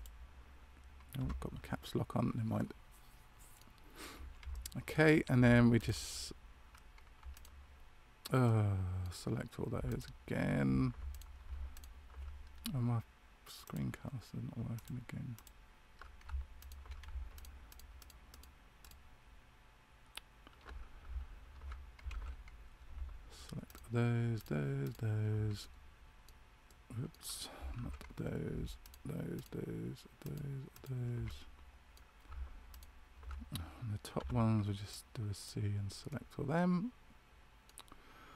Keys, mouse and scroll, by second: 16.5 alt+shift+right click, 22.1 ctrl+z, 23.6 alt+shift+right click, 25.5 middle click, 27.7 ctrl+z, 28.8 alt+shift+right click, 30.7 alt+shift+right click, 31.2 middle click, 32.7 alt+shift+right click, 34.1 c.